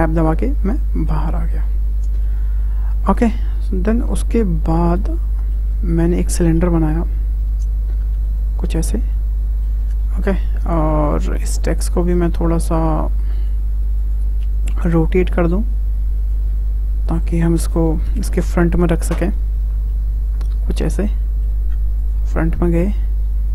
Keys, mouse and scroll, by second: 3.9 scroll down 2, 4.5-5.2 scroll up 3, 5.2-6.4 shift+middle drag, 6.4 shift+a, 8.8 scroll down 1, 9.1 middle click, 9.8 scroll down 2, 10.0 middle click, 10.6 scroll down 2, 10.8-11.6 middle drag, 11.6 click, 12.0 click, 13.3-14.8 drag, 17.1-19.6 drag, 19.6 w, 20.3 click, 21.1-21.6 middle drag, 21.6 `, 22.4 scroll up 1, 22.9 click.